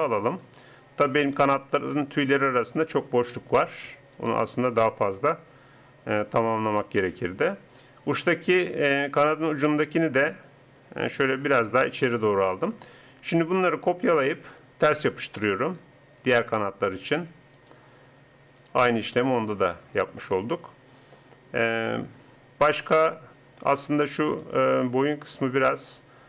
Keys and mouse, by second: 4.2-6.0 right drag, 6.7 r, 13.5-15.3 drag, 15.7 click, 24.3-25.6 right drag, 25.6 r.